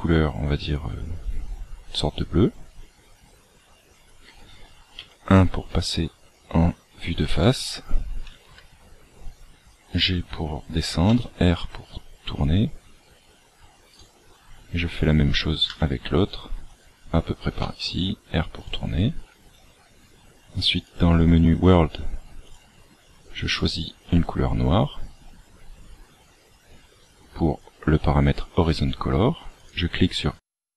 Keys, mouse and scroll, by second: 4.9 KP_1, 8.3 g, 11.1 r, 13.9 right click, 15.6 g, 17.5 r, 20.8 click, 22.4 click, 29.5 click.